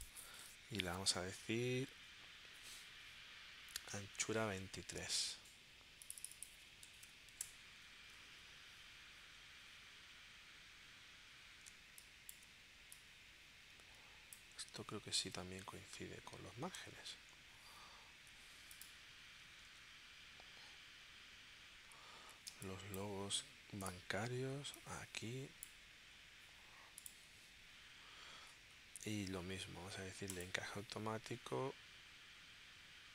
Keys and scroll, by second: 6.9 2, 7.4 Return, 11.7 space, 17.0 super+Tab, 22.5 space.